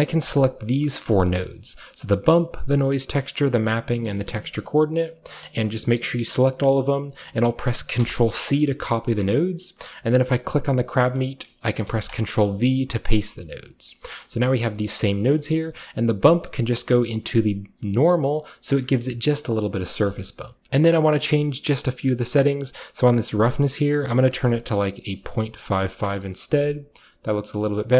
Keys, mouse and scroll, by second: 0.2 shift+click, 1.1 shift+click, 1.3-2.1 shift+scroll up 2, 2.1-3.2 shift+scroll up 1, 2.7-8.0 shift+drag, 8.0 ctrl+c, 10.9-11.9 right drag, 10.9-12.1 scroll down 1, 11.0-12.7 middle drag, 11.9 ctrl+v, 12.7-15.3 typing, 13.2 click, 13.7 click, 14.2 click, 14.9 click, 15.2-16.1 scroll up 1, 16.1 scroll up 1, 16.3-18.0 drag, 19.0-19.7 shift+scroll up 1, 19.7-21.2 scroll up 1, 21.2 scroll up 1, 23.5 click, 23.9 click, 25.6 typing, 26.1 Return, 27.6-27.9 middle drag.